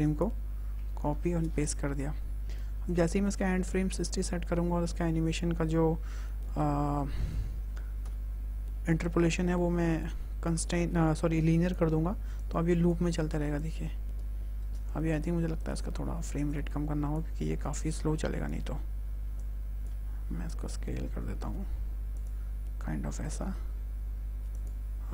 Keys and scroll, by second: 0.9 ctrl+c, 1.2 ctrl+v, 3.3 KP_6, 3.6 KP_0, 3.8 Return, 6.3 a, 7.9 t, 13.0 space, 14.4 space, 20.1 s, 23.3 g.